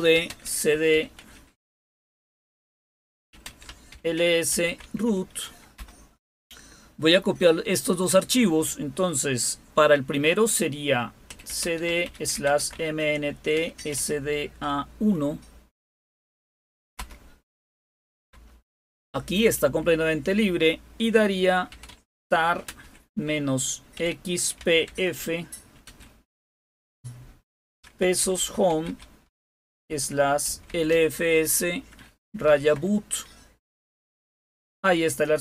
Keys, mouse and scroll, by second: 0.0-5.1 typing, 5.7 Return, 6.8-7.5 typing, 11.0-14.4 typing, 15.7 typing, 16.9-18.2 typing, 21.4-25.8 typing, 27.6-32.9 typing.